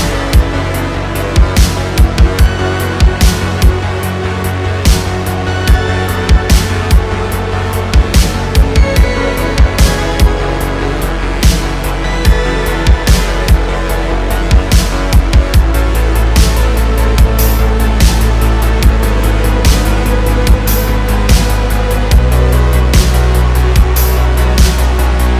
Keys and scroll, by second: 6.7 shift+a, 9.3 `, 10.5 Tab, 11.4 alt+z, 13.5 Tab, 14.9 s, 16.6 shift+., 17.1 s, 20.8 Tab, 25.2 3.